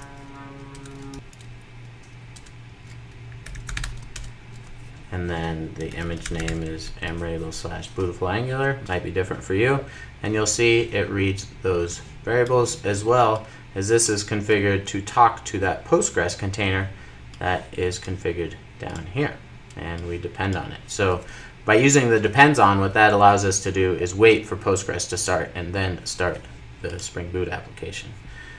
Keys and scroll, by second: 4.0 Return, 6.7 super+s.